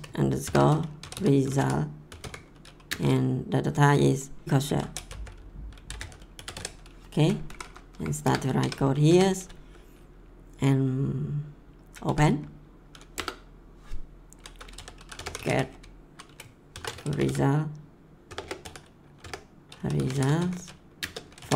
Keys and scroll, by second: 0.0-2.8 typing, 4.5-7.0 typing, 7.4 Down, 8.2 Return, 8.6 Tab, 9.0 BackSpace, 11.8-12.7 typing, 13.1 Return, 14.5-21.5 typing.